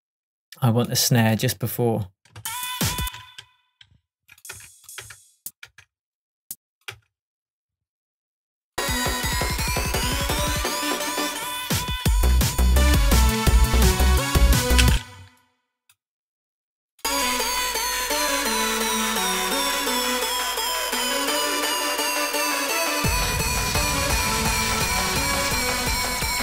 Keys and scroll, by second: 2.4 space, 4.6 BackSpace, 7.0 BackSpace, 13.5 shift+Tab, 14.9 space.